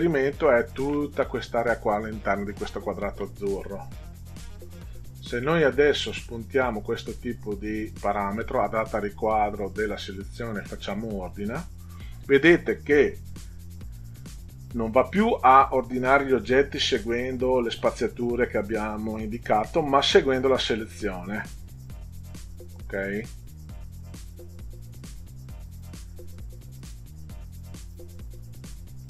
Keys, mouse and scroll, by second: 6.6 click, 11.1 click.